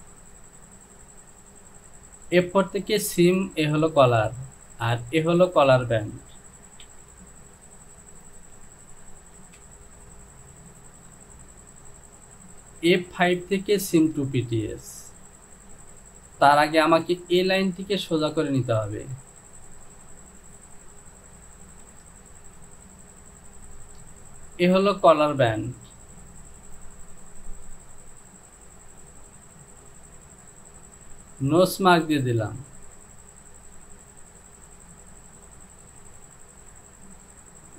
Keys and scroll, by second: 7.0 j, 9.6 Home.